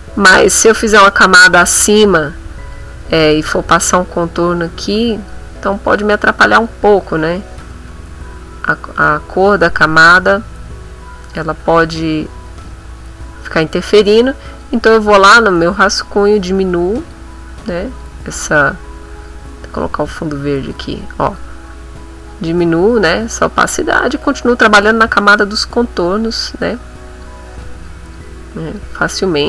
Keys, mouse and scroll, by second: 1.0 click, 2.3 middle click, 3.0-4.1 ctrl+middle drag, 4.3 ctrl+middle click, 5.0 click, 5.7 shift+click, 6.4 click, 6.9 ctrl+click, 7.2 ctrl+z, 8.5 click, 10.0-11.1 middle drag, 11.2 ctrl+click, 11.8 ctrl+z, 12.4-13.7 drag, 14.5 click, 15.7 click, 17.0 click, 17.9 click, 20.9 click, 21.3 click, 22.3 click, 23.2 click, 23.6 click, 25.2-26.2 drag, 26.2-27.4 drag, 27.6-29.4 drag.